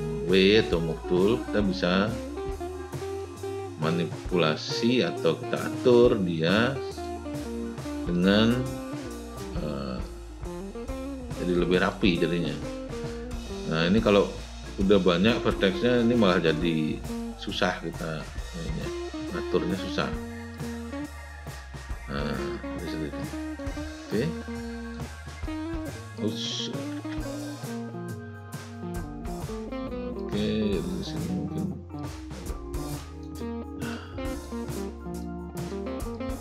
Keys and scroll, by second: 27.0 z.